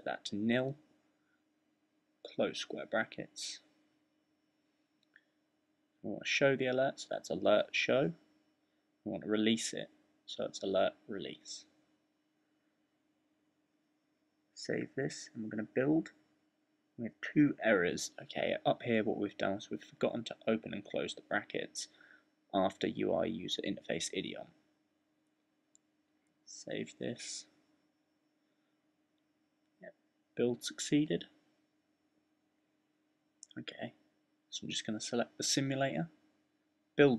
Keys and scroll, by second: 0.0-3.4 typing, 4.6-16.4 typing, 23.5 typing, 25.4 shift+super+b.